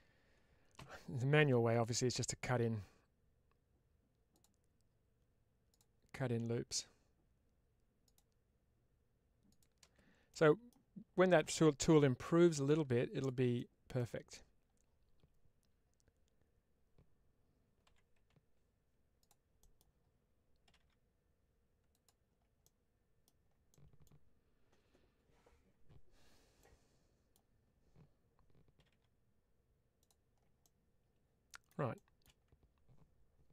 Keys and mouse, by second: 10.2 middle click, 11.8 1, 12.4 click, 13.4 middle click, 19.1 click, 19.5 middle click, 21.8 click, 22.5 middle click, 23.6 middle click, 26.5 middle click, 29.9 click, 30.5-31.5 middle drag, 31.8 shift+middle click.